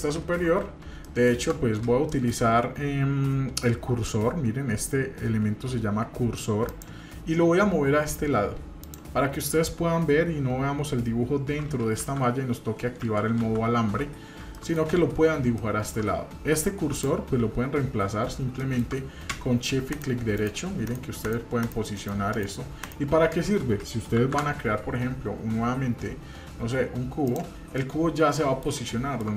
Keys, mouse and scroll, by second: 0.2-0.5 scroll down 2, 1.0-1.4 shift+middle drag, 2.1 shift+middle click, 4.1-4.7 scroll down 1, 6.7 click, 8.8 click, 12.0 shift+z, 13.0 shift+z, 14.5-14.9 shift+middle drag, 15.0-15.4 scroll up 2, 15.6-16.0 shift+middle drag, 17.0 click, 18.0-18.4 scroll down 2, 18.6 shift+middle click, 19.9 shift+right click, 20.4 shift+right drag, 21.3 shift+right drag, 21.6 shift+right drag, 22.0 shift+right drag, 22.4 shift+right click, 23.0 shift+right click, 24.2 shift+a, 27.7-28.6 middle drag, 28.9-29.3 shift+middle drag.